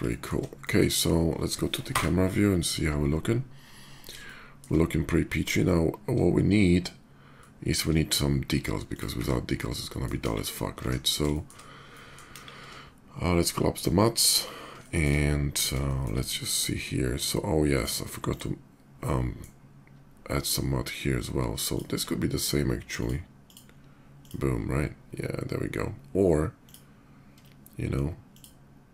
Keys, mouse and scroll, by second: 0.4 shift+middle click, 1.6 KP_0, 4.0-4.4 shift+middle drag, 7.2 shift+middle click, 8.6 shift+click, 9.4 middle drag, 9.6 middle drag, 10.2 KP_5, 10.5 middle click, 10.7 KP_5, 11.1 middle click, 11.7 middle click, 12.1 KP_5, 13.5 click, 14.6 shift+middle click, 15.3 shift+middle click, 15.6 shift+middle click, 16.3 shift+click, 17.5 shift+click, 17.9 shift+click, 18.8-19.2 middle drag, 21.2 shift+middle drag, 21.5 shift+click, 23.0 shift+click, 23.9 shift+click, 26.4 click, 28.1 shift+click.